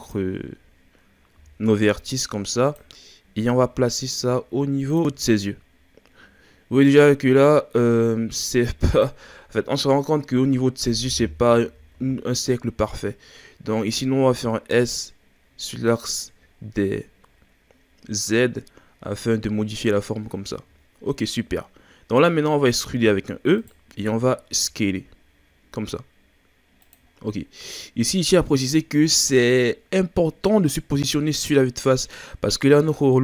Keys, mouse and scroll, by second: 0.4-1.4 scroll up 2, 1.4 g, 3.0 ctrl+scroll up 1, 3.6 s, 9.5-10.6 scroll down 4, 10.6 scroll up 2, 11.7 s, 16.5-17.2 scroll down 3, 17.2-18.9 scroll down 6, 18.9-20.9 scroll up 7, 20.9-22.9 shift+scroll down 2, 23.0 e, 27.1-28.3 scroll down 4, 33.1-33.2 middle drag.